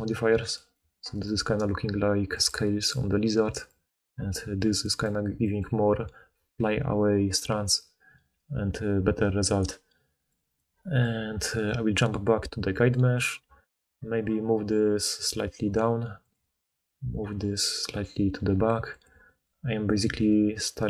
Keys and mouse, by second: 0.4-5.6 right drag, 2.4 click, 3.6 click, 5.6-9.2 middle drag, 9.2-10.5 right drag, 10.5-11.5 middle drag, 11.5 click, 11.6 middle click, 11.9 click, 12.0-16.5 middle drag, 12.6 Tab, 13.4 g, 17.2 g.